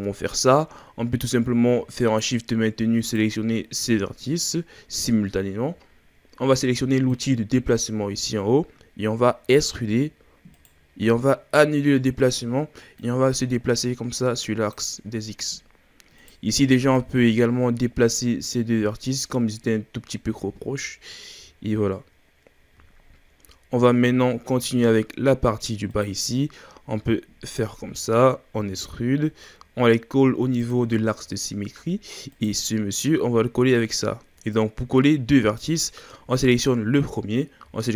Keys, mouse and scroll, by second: 2.0 shift+right click, 3.0 shift+right click, 7.1-9.5 drag, 9.5 e, 13.0-15.4 drag, 15.4-16.2 scroll up 3, 16.2 right click, 16.9-19.4 drag, 19.4-20.7 scroll down 10, 20.7-21.6 scroll up 3, 21.6-23.0 shift+scroll down 3, 23.0-23.5 shift+scroll up 7, 24.1-24.9 shift+scroll down 8, 24.9-25.9 scroll up 2, 25.9 right click, 27.5 shift+right drag, 28.6 e, 31.0-32.3 shift+scroll up 9, 32.3 right click, 34.5-37.6 drag.